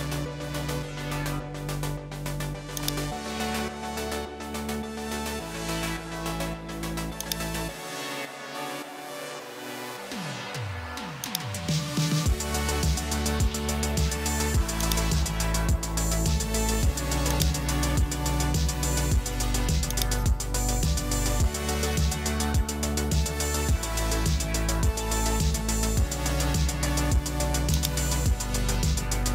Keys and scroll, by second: 5.4 super+m, 22.7-24.4 typing.